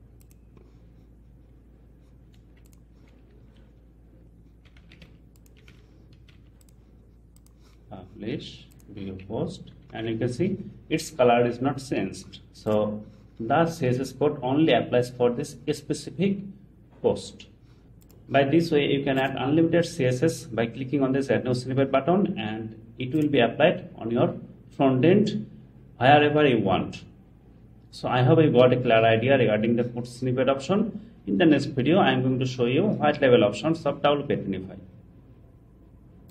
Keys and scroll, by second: 9.9 super+r.